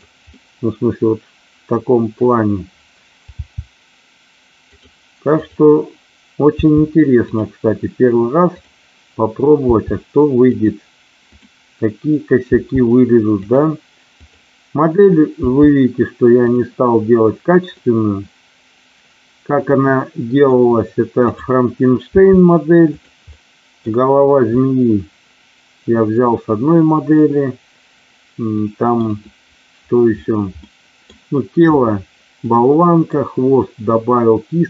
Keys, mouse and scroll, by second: 0.4-2.2 middle drag, 3.3 g, 4.7 click, 5.4 click, 6.4 g, 8.5 click, 9.7 g, 10.5 click, 11.1 click, 12.4 g, 13.4 click, 14.2 click, 16.4 click, 17.7-20.4 middle drag, 22.0 g, 22.9 click, 23.2 middle click, 24.5-29.1 middle drag, 30.7 middle click, 30.9-32.4 scroll down 1, 32.4-33.0 scroll up 1.